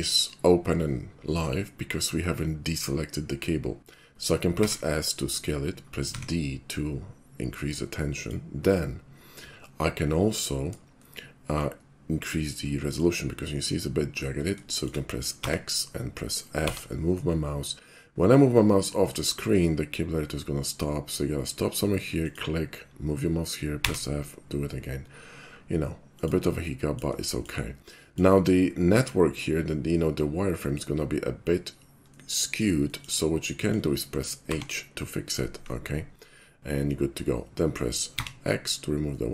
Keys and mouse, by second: 0.0 shift+click, 4.6 s, 6.1 d, 8.2 click, 11.0 shift+middle click, 12.7 shift+middle click, 14.7 shift+middle click, 15.4 x, 16.7 f, 22.2 click, 23.9 f, 26.2 click, 26.7-27.0 middle drag, 27.3 shift+middle click, 28.0 shift+middle click, 32.1 middle click, 32.9 shift+middle click, 33.5 shift+middle click, 34.4 h, 38.2 x, 39.2-39.3 middle drag.